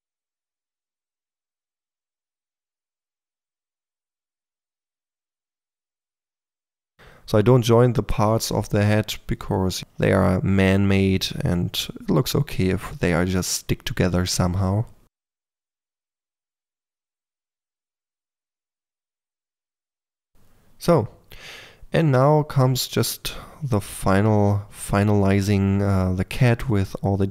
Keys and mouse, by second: 0.5-1.8 typing, 0.7 click, 1.0 click, 1.5 click, 2.3 click, 2.9 click, 2.9-5.0 typing, 3.3 click, 3.7 click, 4.6-6.0 drag, 6.8 ctrl+click, 7.4-9.8 typing, 7.8 Tab, 8.4 Tab, 9.3 Tab, 10.2 click, 10.8-11.3 drag, 11.6-12.0 drag, 12.4 click, 12.7 f, 12.7 click, 13.0 drag, 13.3 middle click, 14.1 middle drag, 14.3 click, 14.5 middle click, 14.6 KP_4, 15.0 f, 15.2-16.4 drag, 16.1 f, 16.7 KP_3, 17.5 click, 17.7 click, 18.4-19.5 drag, 19.6 click, 19.9 f, 20.5 f, 20.6 middle drag, 21.2 middle click, 21.6 click, 21.7 Tab, 21.8 a, 22.9 middle click, 23.1 click, 23.1 Tab, 23.8 click, 24.4 3, 24.5 f, 26.8 click, 27.0 middle click.